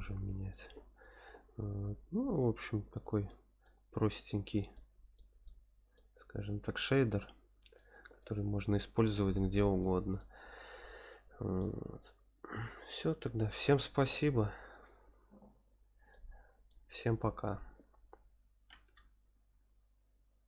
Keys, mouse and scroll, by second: 1.8-3.3 scroll down 3, 3.6-4.1 shift+middle drag, 4.7-5.1 shift+middle drag, 5.4-5.9 middle drag, 6.2 scroll up 1, 7.1-7.8 shift+middle drag, 8.2-9.4 middle drag, 9.8-10.2 shift+middle drag, 11.6-12.7 middle drag, 12.9 middle click, 15.5 scroll up 2, 16.1-16.7 middle drag.